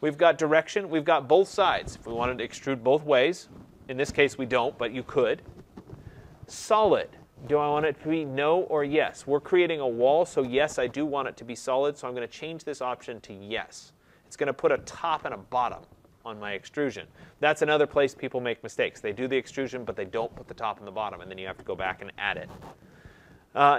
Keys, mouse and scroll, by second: 12.8-17.8 drag.